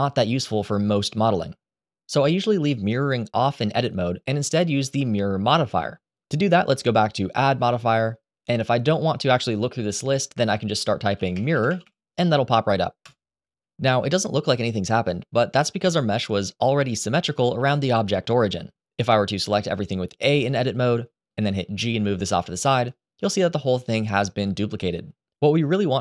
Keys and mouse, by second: 4.0 click, 7.3 click, 11.4 r, 19.2 a, 21.5 g, 25.6 Escape.